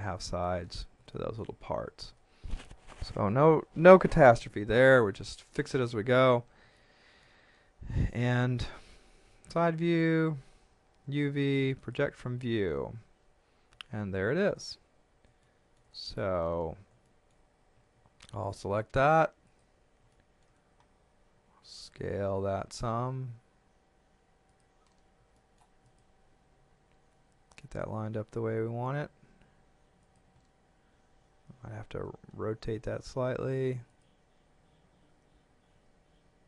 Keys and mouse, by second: 1.1 shift+middle click, 4.4 KP_1, 6.7 shift+middle click, 8.1 shift+middle click, 9.3 KP_3, 11.0 u, 11.8 click, 15.5 shift+middle click, 17.1 shift+middle click, 17.7 a, 18.5 click, 20.1 shift+middle click, 21.3 s, 24.5 click, 25.3 shift+middle click, 25.9 click, 30.1 click, 33.9 click, 35.2 r.